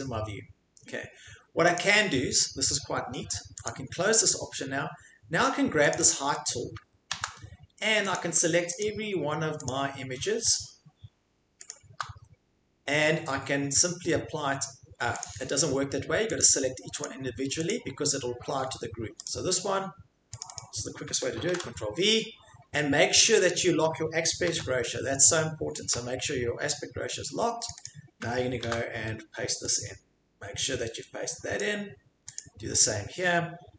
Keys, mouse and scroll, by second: 1.8 click, 3.6 click, 5.9 click, 6.1 click, 7.1 ctrl+c, 8.1 click, 8.8 shift+click, 9.7 shift+click, 10.6 shift+click, 15.2 click, 16.4 click, 17.7 click, 19.2 click, 20.4 click, 20.6 click, 24.5 ctrl+z, 25.9 click, 27.7 click, 27.8 click, 28.7 ctrl+v, 31.6 click, 32.4 click.